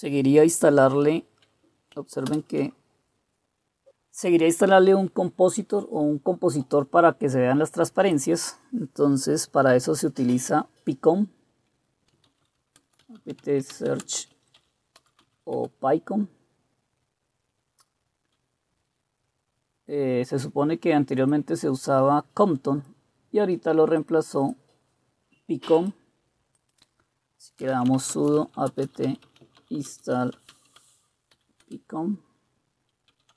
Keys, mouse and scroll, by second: 2.3 super+Return, 11.9-15.7 typing, 27.5-31.3 typing, 31.6 Return, 32.8-33.3 typing.